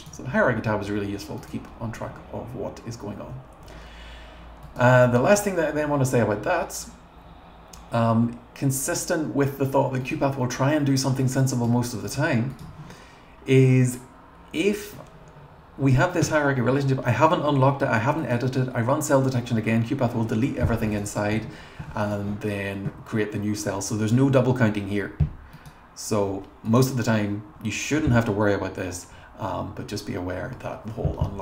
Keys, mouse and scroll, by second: 1.4 click, 12.0 click, 12.5 click, 18.2 click, 20.9 click, 21.1 click, 21.3 1, 22.0 click, 25.6 click, 26.7 click.